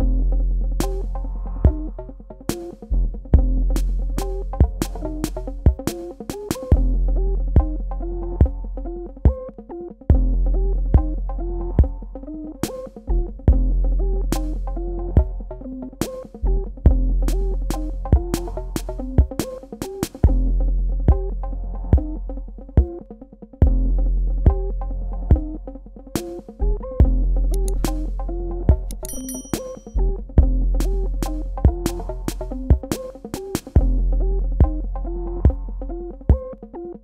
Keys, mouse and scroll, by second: 0.6 click, 0.7 space, 1.0 click, 1.3 space, 1.9 click, 11.5 v, 11.7 click, 12.3 Tab, 13.1 g, 15.1 click, 24.8 v, 24.9 click, 25.3 space, 25.5 ctrl+alt+click, 30.2 space, 32.7 p, 34.5 KP_Add, 35.6 super+KP_Subtract.